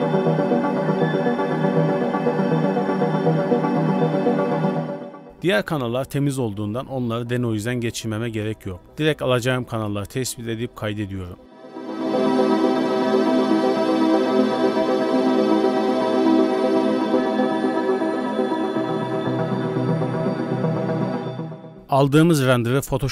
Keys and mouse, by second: 4.3 ctrl+shift+click.